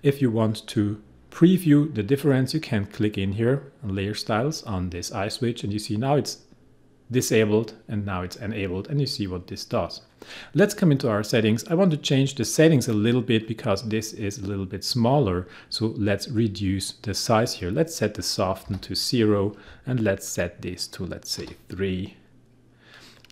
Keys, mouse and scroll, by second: 5.3 click, 7.7 click, 17.3 click, 18.7 0, 18.8 click, 21.3 3, 21.8 click.